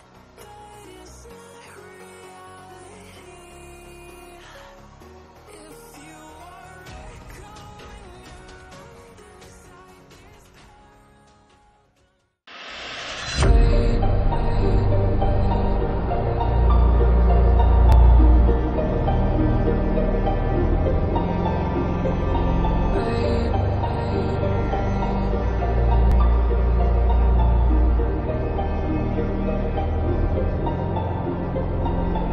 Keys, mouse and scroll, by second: 1.3 click, 3.9 space, 4.7-6.2 click, 4.9 space, 6.2 space, 7.3 click.